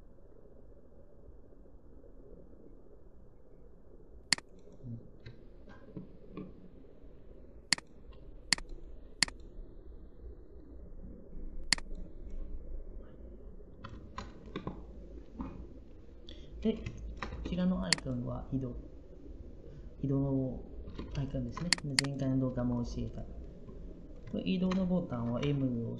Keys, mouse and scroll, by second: 17.1 Up, 25.3 m.